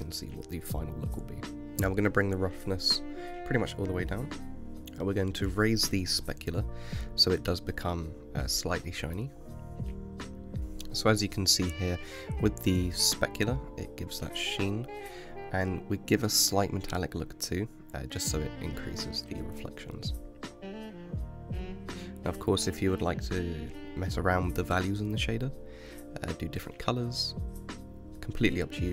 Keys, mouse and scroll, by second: 0.6-1.1 scroll down 5, 1.1-1.9 middle drag, 1.9-4.8 drag, 4.8-5.8 middle drag, 5.8-7.8 drag, 7.8-10.6 middle drag, 10.6-12.2 scroll down 4, 12.2 r, 21.1-24.8 middle drag, 24.8-26.4 scroll up 7, 26.4-27.2 scroll down 9, 27.2-28.0 middle drag, 28.0-28.4 scroll down 5, 28.4-28.9 middle drag.